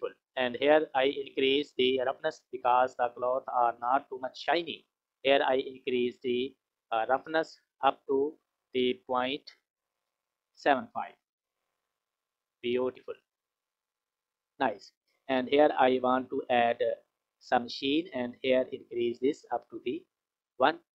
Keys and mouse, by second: 1.3 click, 6.0 click, 6.3-7.6 middle drag, 7.7-11.2 middle drag, 13.8 middle click, 17.2 middle click, 18.6 middle click, 19.2 click.